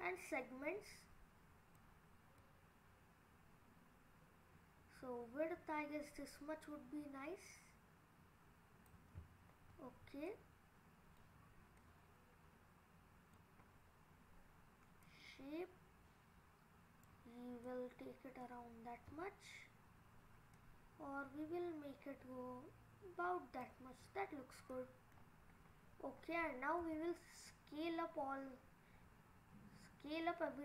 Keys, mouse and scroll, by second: 0.2 click, 2.4 click, 9.4-10.3 scroll down 3, 10.3 middle click, 11.8 middle click, 14.2-14.8 scroll up 2, 15.1 click, 17.4 scroll down 2, 17.7 middle click, 18.7-20.5 scroll up 5, 20.5 click, 24.1-24.7 scroll down 2, 24.7 middle click, 25.2-26.0 scroll down 2, 26.0-26.8 scroll down 1, 26.8 s.